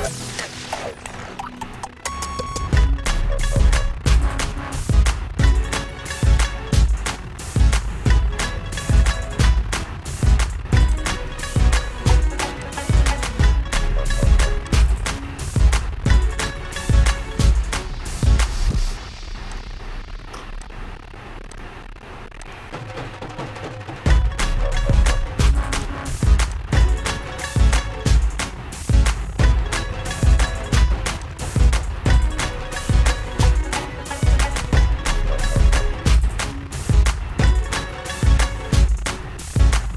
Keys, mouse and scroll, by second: 0.1-1.2 shift+scroll down 6, 1.2 shift+scroll up 1, 1.5-3.1 shift+scroll down 21, 3.7 shift+scroll up 26, 3.8-5.2 shift+scroll, 5.2-5.9 scroll, 5.9-6.4 scroll, 6.9 shift+scroll down 10, 7.6-7.9 shift+scroll up 2, 11.2 click, 12.8 click, 13.2 shift+scroll, 15.0 click, 16.8 click, 19.8 click, 20.8 click, 21.9 click, 22.8 click, 26.2 click, 27.1 click, 27.3-28.0 click, 28.2 click, 31.7 shift+click, 32.7 Down, 34.4 Down, 35.5 Down, 36.1 Down, 38.1 Right, 39.2 Down.